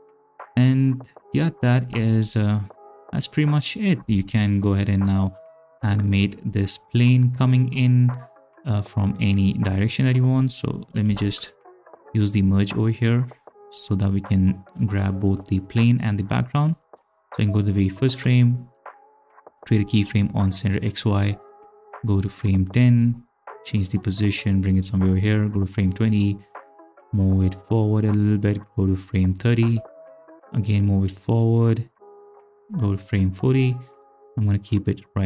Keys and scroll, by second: 1.9 space, 4.0 space, 11.1 ctrl+z.